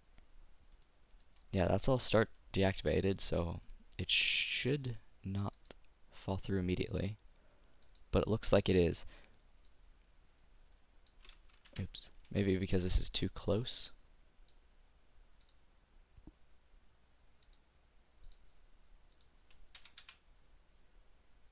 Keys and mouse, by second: 3.0-4.9 drag, 5.6-7.5 drag, 8.1-11.6 drag, 11.9 ctrl+z, 13.6 click, 17.3 middle click, 17.8-20.5 drag.